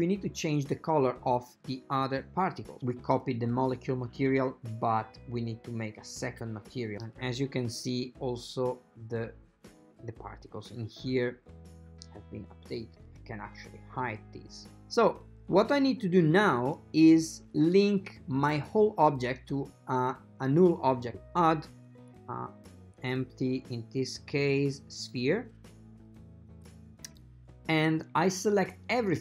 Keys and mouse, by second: 2.7 click, 5.9 click, 13.2 click, 19.7 click, 21.1 shift+a.